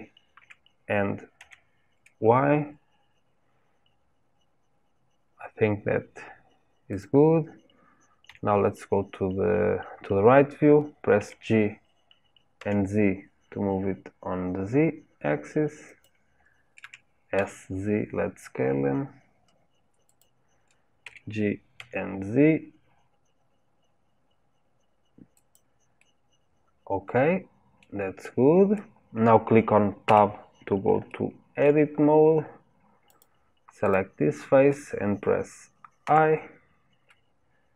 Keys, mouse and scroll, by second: 8.2 KP_3, 11.2 g, 21.0 g, 26.0-29.0 middle drag, 30.0 Tab, 31.0 shift+middle click, 31.9-32.6 scroll up 1, 32.6-33.0 scroll up 1, 33.0 click, 33.8 click, 36.0 i.